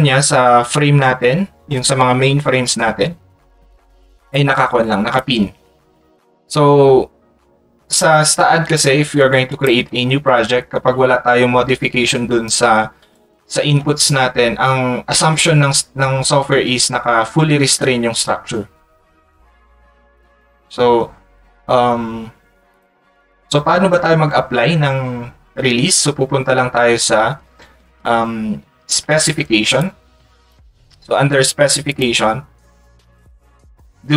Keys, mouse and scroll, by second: 33.7 click.